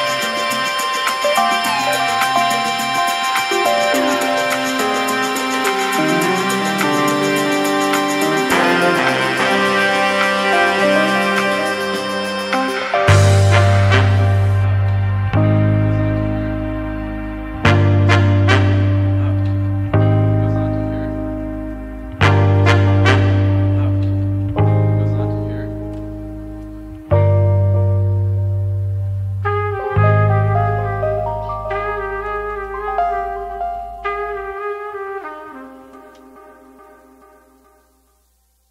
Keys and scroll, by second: 17.8 ctrl+KP_0.